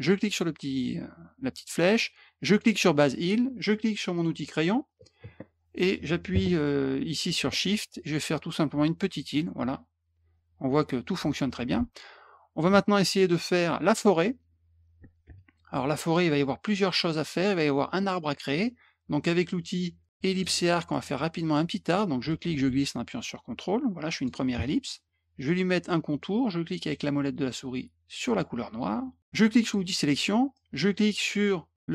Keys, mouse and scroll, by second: 0.3 click, 2.5 click, 4.1 click, 7.7-9.2 shift+drag, 11.8 ctrl+z, 13.1 middle click, 16.1 middle click, 20.3 click, 20.9 middle click, 21.0 middle click, 21.3 middle click, 22.3-24.2 ctrl+drag, 28.2 middle click, 29.6 click, 30.5-31.9 drag.